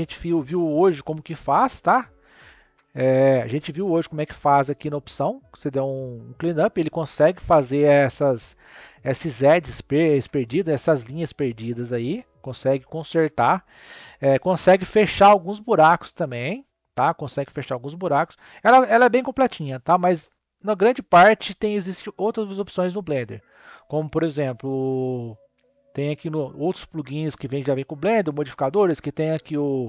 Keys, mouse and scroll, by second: 0.9 m, 4.3 click, 6.4-9.5 drag, 24.6 click, 25.9 n, 27.5 click, 28.6-29.8 drag.